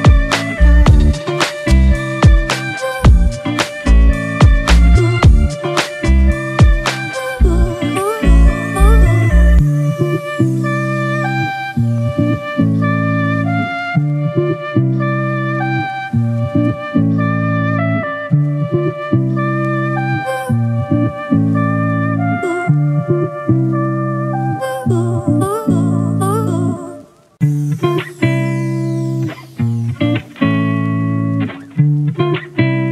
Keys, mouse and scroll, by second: 1.0-1.5 scroll down 1, 1.5-3.1 scroll up 1, 8.2 alt+click, 21.3-22.0 typing, 23.3 typing, 24.4 shift+click, 26.2 shift+click, 27.7 shift+click, 28.6 shift+click, 29.6 shift+click, 30.5 shift+click, 32.8 shift+click.